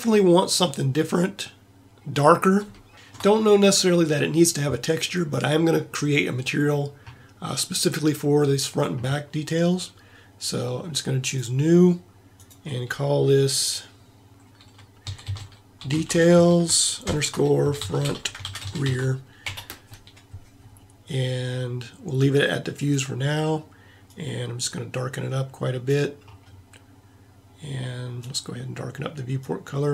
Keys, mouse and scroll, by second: 11.3-14.3 drag, 22.7-29.5 drag.